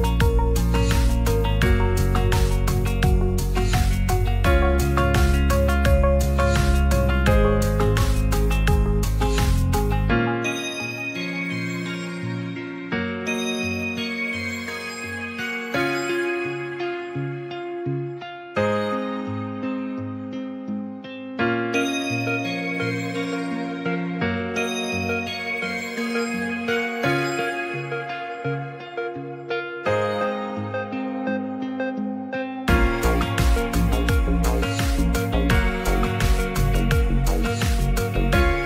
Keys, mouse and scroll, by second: 0.6 click, 1.5 g, 1.5 z, 3.1 s, 3.4 shift+z, 4.9-5.9 middle drag, 6.8 click, 8.7 scroll up 1, 8.8 middle click, 8.9 ctrl+scroll down 1, 9.1 ctrl+s, 10.5 middle click, 12.7 s, 12.9 shift+z, 15.4 click, 16.4 click, 17.4 s, 18.3 click, 19.1 g, 19.3 z, 19.7-20.1 drag, 22.8-23.4 middle drag, 24.3 click, 24.8 Tab, 25.6 Tab, 29.4 Tab, 30.0 alt+z, 30.3 click, 30.7 g, 30.8 z, 31.7 click, 32.7 click, 33.4 s, 35.3 Tab, 36.4 alt+z, 36.7 click, 37.4 ctrl+s, 38.1-38.6 middle drag.